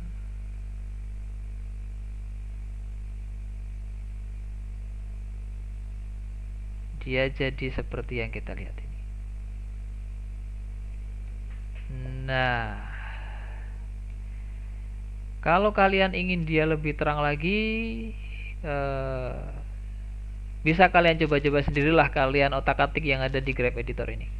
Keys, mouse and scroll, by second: 3.2-6.3 drag, 6.4-10.7 drag, 10.7-11.5 scroll down 7, 11.5-13.9 shift+middle drag, 13.9-14.3 scroll down 1, 14.3-16.3 shift+middle drag, 16.3 shift+click, 18.5 click, 19.8 click, 20.7 click, 21.2 click.